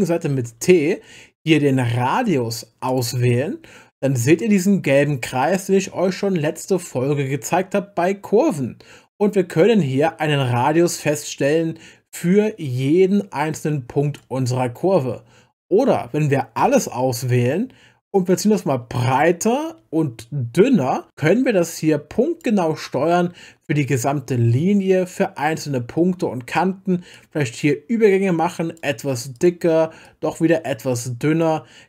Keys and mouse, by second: 0.2 t, 0.6 t, 2.9 click, 10.6 click, 10.7-14.2 drag, 18.6-22.4 drag, 26.5 click, 27.1-28.8 drag, 29.3 click, 30.0 click, 30.4-31.4 drag.